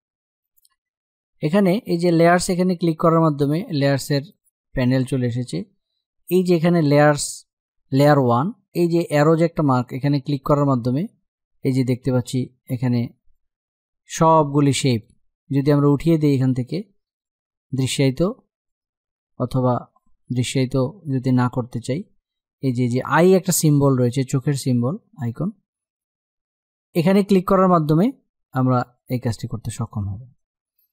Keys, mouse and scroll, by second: 9.3-24.0 drag, 24.2-28.4 drag.